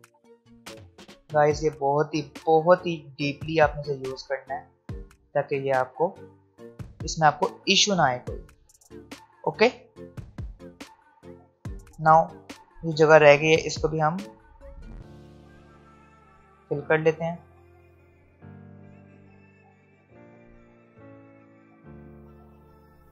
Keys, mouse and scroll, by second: 11.4 alt+scroll up 1, 12.4-12.8 alt+scroll up 1, 16.0-19.1 drag.